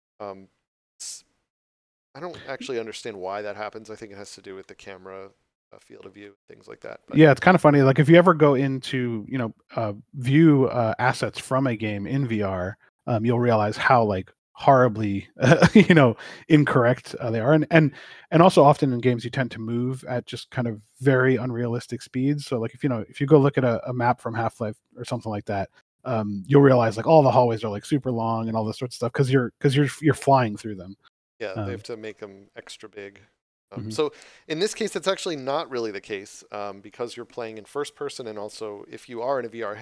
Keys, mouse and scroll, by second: 4.5 middle click, 6.1 shift+middle click, 6.7 middle click, 11.8 scroll down 1, 12.6 middle click, 13.2 scroll down 1, 13.6 middle click, 14.3 right click, 19.5 scroll up 1, 20.3 middle click, 24.0 shift+middle click, 29.5 middle click, 31.4 scroll up 1, 32.0 middle click.